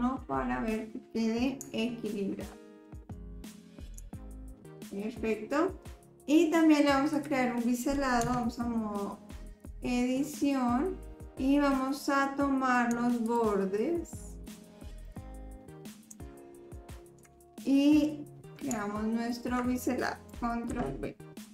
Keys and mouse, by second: 1.8-2.8 shift+drag, 4.3-4.6 shift+drag, 4.8 click, 7.1 click, 8.3 Tab, 9.5 middle click, 13.3 shift+click, 14.4 shift+click, 15.1 click, 17.0 shift+click, 18.9 shift+click, 20.7 ctrl+b.